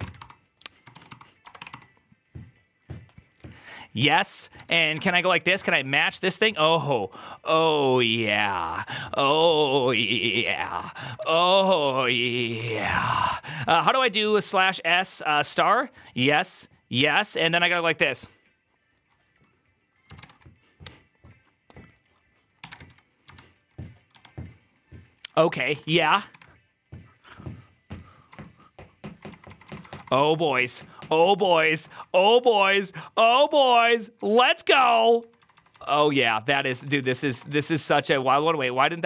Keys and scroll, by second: 0.0-1.6 typing, 4.1 Left, 4.4-5.7 typing, 6.9 typing, 8.5-15.2 typing, 13.3 Left, 13.5 Right, 25.3 Right, 25.3-26.7 typing, 25.4 Right, 25.6 Right, 25.8 Right, 28.1-29.0 Left, 29.2 Left, 29.5 Left, 29.7 Left, 29.8 Left, 30.0 Left, 30.2 shift+', 30.6-31.6 Right, 30.6 ", 31.8 Left, 31.8 Right, 32.1 Right, 32.3 ", 32.5 Right, 32.7 Right, 33.5 ", 34.1 Left, 34.7 Left, 35.0 Left, 35.0 Right, 35.3 Right, 35.4 Right, 35.6 Right, 35.9 Right, 36.5 Left, 36.5 Right, 36.5 BackSpace, 36.7 Right, 36.9 Right, 37.0 Right, 37.2 BackSpace, 37.3 Right, 37.9 Left, 38.1 Left, 38.5 ".